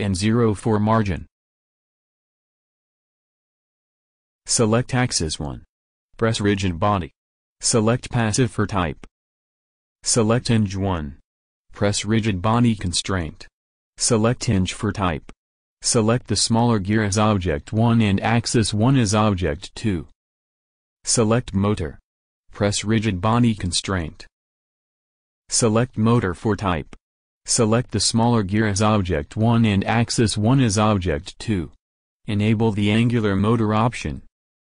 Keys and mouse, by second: 0.5-3.9 drag, 4.8-6.3 drag, 6.3 middle click, 6.6-9.1 drag, 11.3-12.8 drag, 18.2-19.9 drag, 23.0-24.2 drag, 24.2 middle click, 24.9-27.4 drag, 29.6-31.3 drag, 31.7-33.4 drag.